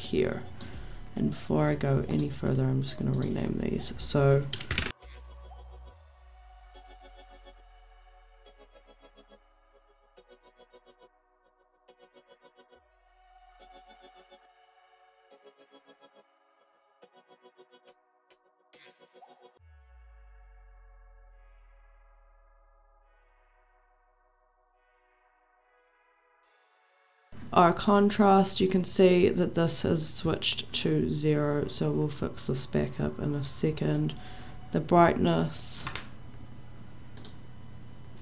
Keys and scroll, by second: 4.4-7.1 typing, 7.4 ctrl+c, 8.6 ctrl+v, 9.0-10.9 typing, 11.8 ctrl+v, 12.1-13.7 typing, 14.4 ctrl+v, 14.8-18.8 typing, 19.7 ctrl+v, 20.1 BackSpace, 20.2 2, 21.3-23.0 typing, 24.4-26.3 typing.